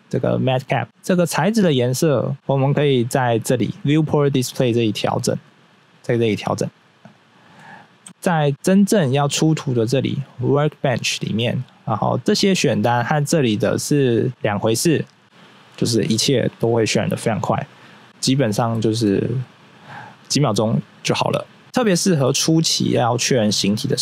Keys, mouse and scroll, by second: 0.1 click, 2.3 click, 2.6 scroll down 1, 5.4 click, 6.2 click, 7.3 click, 8.3 click, 8.7-9.8 scroll up 1, 9.8 click, 10.5 click, 11.6-12.8 scroll down 1, 12.8 scroll down 1, 14.3 click, 17.1 scroll down 1, 18.7 middle click, 19.0 middle click.